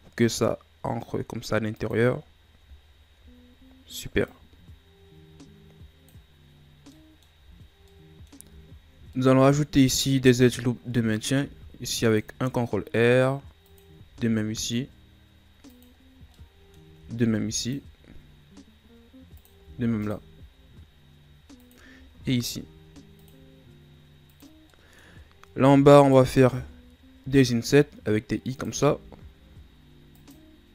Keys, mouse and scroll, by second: 2.3-2.8 scroll down 1, 2.8-4.3 scroll up 3, 4.3-6.9 drag, 6.9 middle click, 7.4 z, 7.7 scroll down 1, 7.9-11.4 middle drag, 11.4 ctrl+r, 14.1 ctrl+r, 16.3 middle click, 17.1 ctrl+r, 19.8 ctrl+r, 24.7 middle click, 25.2-26.0 scroll up 1, 26.0 alt+right click, 27.2 i, 28.8 i.